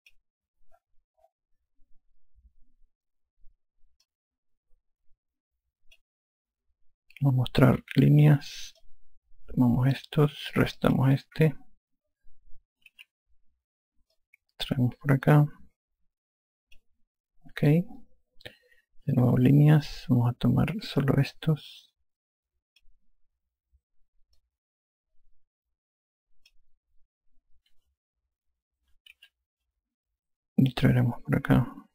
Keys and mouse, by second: 5.1 click, 8.6-9.5 typing, 9.8 click, 11.8 click, 13.7 n, 14.1 a, 15.2 click, 20.2 n, 22.1 click, 25.4 click, 30.0 n, 31.7 click.